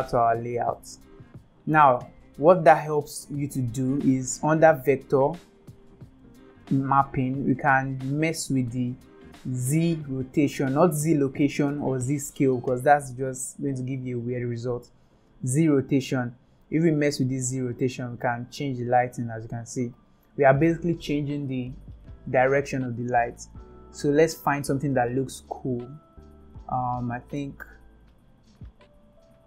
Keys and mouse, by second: 2.8-3.9 shift+middle drag, 5.8 click, 16.0-20.5 drag, 23.1 ctrl+z, 24.6-25.8 drag, 27.5 shift+middle click, 28.4-29.4 drag.